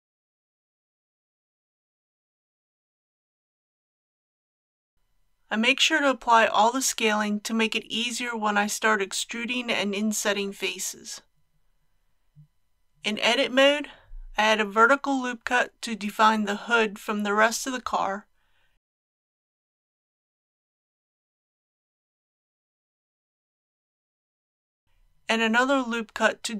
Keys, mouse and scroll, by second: 0.0-0.7 typing, 6.5 ctrl+a, 8.4 click, 12.8 Tab, 14.4 2, 18.4 ctrl+r, 19.0 click.